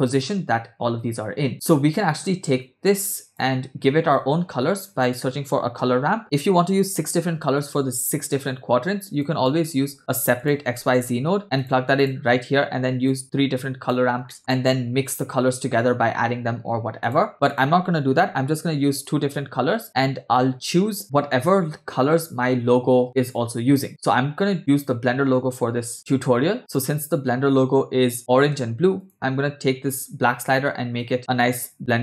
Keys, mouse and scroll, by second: 1.5 space, 2.1-3.4 drag, 4.1 shift+a, 9.2 click, 9.8 shift+a, 13.1-14.0 drag, 14.3 middle click, 17.0 click, 17.5 click, 18.1 ctrl+x, 19.1 click, 26.6 click, 29.0 click, 29.9 click.